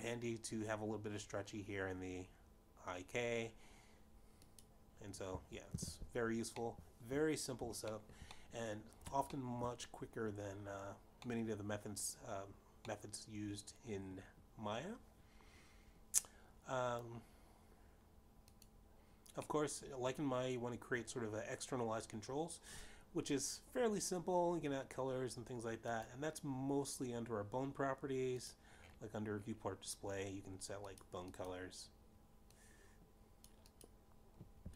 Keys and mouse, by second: 7.2 click, 8.2 alt+g, 9.4 middle click, 10.7 shift+middle click, 11.2 middle click, 12.1 shift+middle click, 13.9 middle click, 15.3 middle click, 20.9 click, 22.3 middle click, 28.7 click, 31.2 click, 33.8 click, 34.0 click.